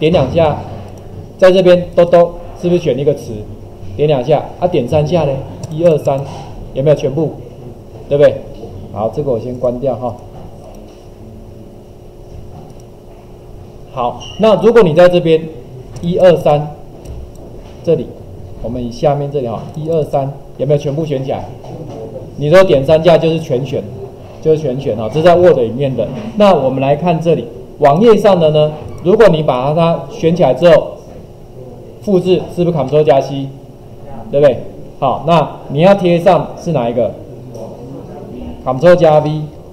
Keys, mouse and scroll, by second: 0.9 click, 2.1 click, 5.6 click, 14.5 click, 16.4 click, 17.1 click, 28.8 click, 29.5 click.